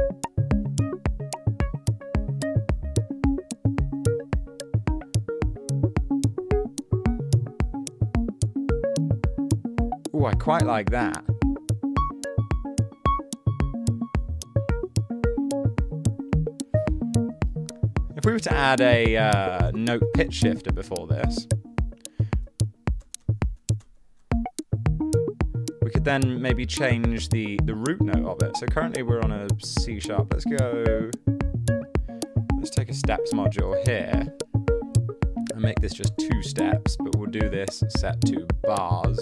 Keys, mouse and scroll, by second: 19.5-21.0 typing, 23.2 space, 23.6 space, 23.8 space, 24.2 space, 32.7-33.6 typing, 33.7 Return, 36.0 2, 36.1 Return.